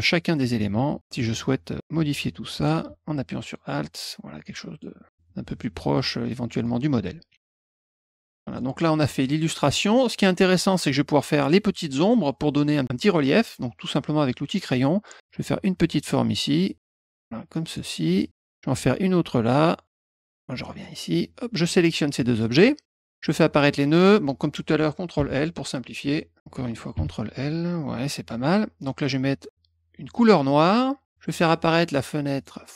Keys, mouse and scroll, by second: 0.0 click, 1.0 click, 1.8 shift+click, 2.7 alt+click, 4.3 click, 5.1 middle click, 6.5 click, 7.3 F1, 7.6 middle click, 7.8 middle click, 8.2 click, 8.5 click, 10.5 middle click, 14.4 click, 15.4-17.7 drag, 18.1 middle click, 18.8-20.8 drag, 21.9 click, 22.6 shift+click, 23.5 click, 25.1 ctrl+l, 25.9 ctrl+l, 26.9 ctrl+l, 30.1 click, 32.3 click.